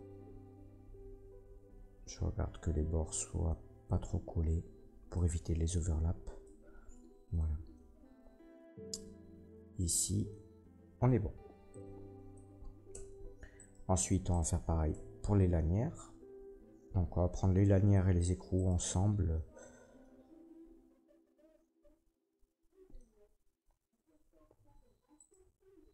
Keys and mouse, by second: 11.9-13.5 drag, 12.9 Tab, 13.5 middle click, 13.7-14.3 drag, 14.3 middle click, 14.4-23.9 drag, 14.9 Tab, 15.4 a, 17.3 Tab, 18.5 middle click, 18.5 right click, 25.1 shift+click.